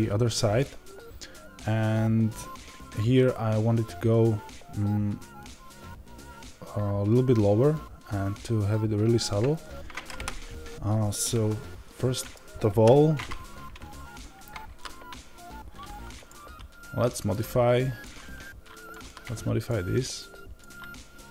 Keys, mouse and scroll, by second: 12.6 KP_7, 17.7-21.3 drag.